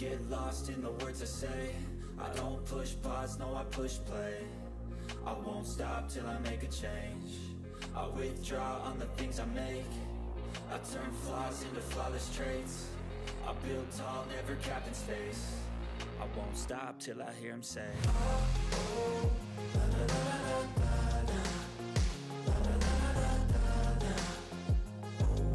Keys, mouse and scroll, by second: 0.0 click, 0.6 Right, 2.9-4.1 typing, 5.8 click, 7.1 Return, 7.9 typing, 9.0-10.0 typing, 11.2 a, 11.3 Return, 12.1 /, 13.1 click, 13.7-14.0 scroll up 1, 15.1 scroll down 1, 16.5 scroll down 1, 16.5 click, 17.7 Return, 18.0-22.4 typing, 23.0 click, 23.6-24.6 typing.